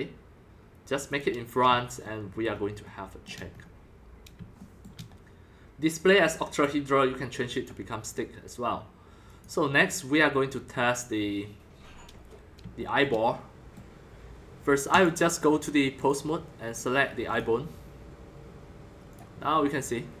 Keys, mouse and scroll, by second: 2.4-3.8 shift+middle drag, 3.8 scroll, 4.1-5.3 middle drag, 5.3 shift+middle click, 5.6-6.6 middle drag, 6.6-10.5 drag, 10.8 drag, 11.1-12.1 drag, 12.1-15.0 middle drag, 15.0-17.3 drag, 18.5-19.1 drag, 19.8-20.2 drag.